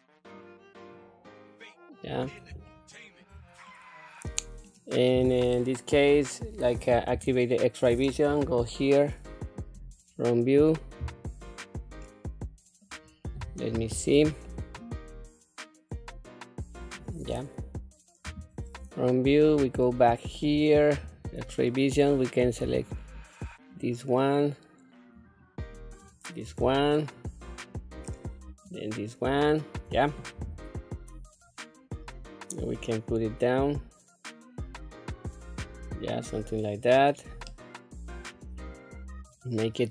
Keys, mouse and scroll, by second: 2.7 shift+middle click, 3.6-4.6 middle drag, 5.1-5.7 scroll down 1, 7.1 q, 8.3 KP_1, 9.6 click, 12.0 middle click, 13.0-13.7 scroll down 1, 13.7 q, 14.4-16.9 middle drag, 18.2 KP_1, 18.9-19.6 scroll up 3, 19.8 shift+middle click, 20.9 q, 23.8 shift+click, 25.2 shift+click, 26.9 shift+middle click, 28.6 shift+click, 30.4 q, 31.3-31.7 scroll down 3, 32.7-35.6 drag, 36.2 middle click, 36.9 scroll down 1, 37.4 middle click, 38.5-38.9 scroll down 2, 39.1-39.9 middle drag.